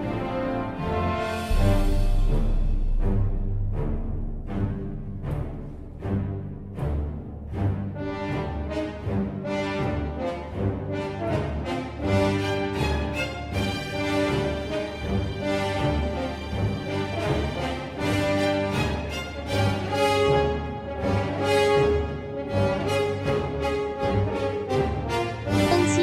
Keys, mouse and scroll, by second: 4.8 click, 7.3 click, 9.3 right click, 11.0 click, 18.9 click, 20.2 right click, 21.2 click.